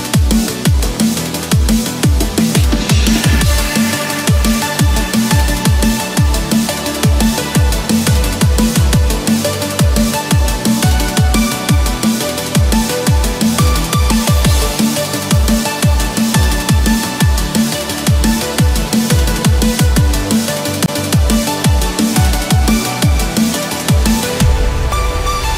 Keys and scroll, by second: 1.0 ctrl+=, 14.6 ctrl+-, 18.2 ctrl+=, 21.6 ctrl+-, 22.1 ctrl+=.